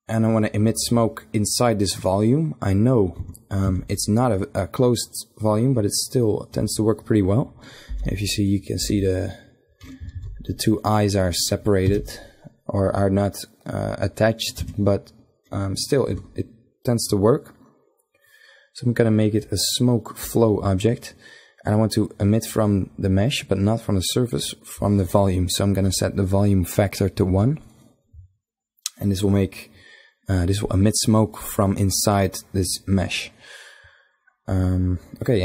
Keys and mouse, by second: 1.2 click, 1.6-2.9 middle drag, 3.1 Tab, 3.6 a, 7.8 l, 8.7 l, 10.1 ctrl+z, 11.8 g, 14.5 Tab, 19.3-21.9 drag, 21.9-24.3 middle drag, 24.3-25.3 drag, 25.3-33.1 middle drag.